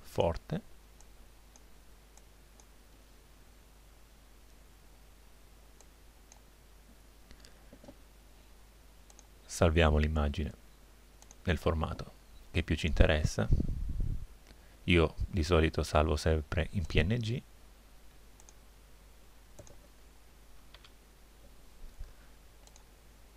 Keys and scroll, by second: 20.7 2.